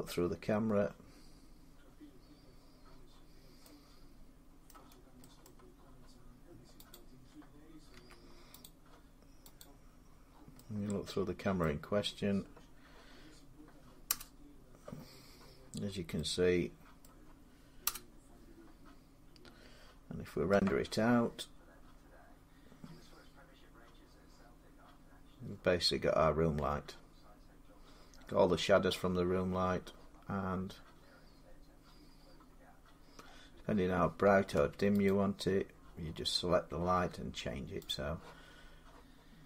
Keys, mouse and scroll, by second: 3.3 scroll up 1, 4.5 middle click, 4.6 scroll down 6, 5.2 scroll down 4, 5.3 middle click, 5.9 scroll, 6.8 click, 7.8 x, 8.5 click, 9.4 click, 10.1 scroll up 5, 11.2 scroll, 11.4 middle click, 13.9 0, 15.5 scroll, 15.6 scroll up 5, 16.9-19.0 middle click, 17.7 0, 20.3 F12, 30.2-30.9 scroll up 2, 30.9-31.9 scroll down 5, 31.9 scroll down 3, 32.2-34.4 scroll, 34.4 Tab, 34.9 click, 37.7 click.